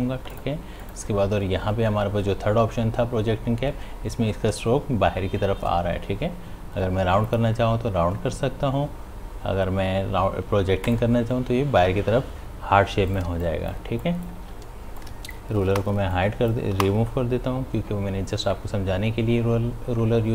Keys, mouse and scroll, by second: 7.3 click, 10.9 click, 10.9 click, 13.1 click, 13.3 space, 13.5 click, 13.8 space, 14.4 space, 15.1-18.9 drag.